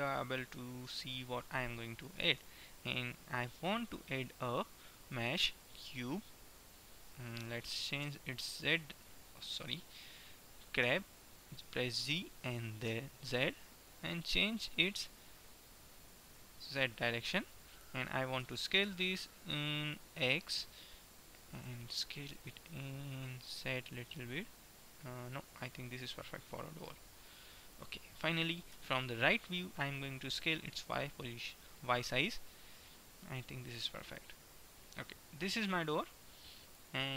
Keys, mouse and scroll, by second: 1.3-4.0 middle drag, 2.7 KP_1, 4.0 shift+a, 8.2 z, 9.8 z, 11.0 g, 18.7 s, 21.8 s, 26.3-27.7 middle drag, 28.8 KP_3, 30.3 s, 34.2-36.2 middle drag.